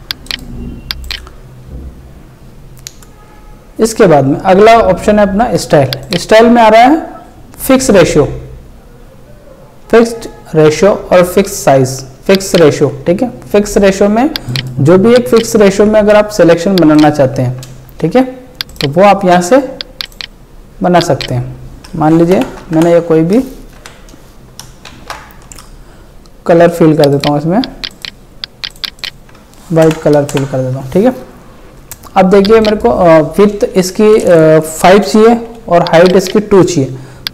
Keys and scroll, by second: 22.4 ctrl+Delete, 23.8 ctrl+d, 24.9 ctrl+shift+e, 29.8 ctrl+Delete.